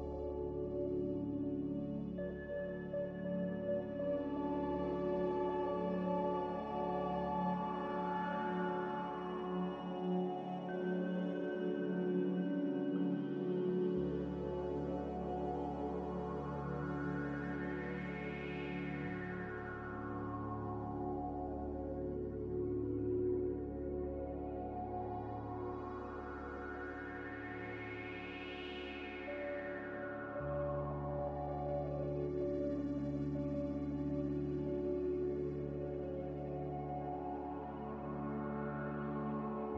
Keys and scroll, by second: 0.7 c, 36.3 a.